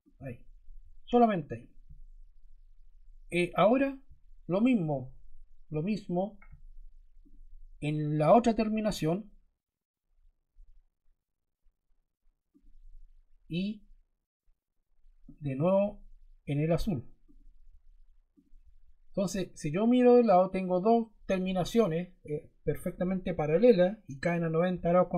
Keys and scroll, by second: 5.6 Escape.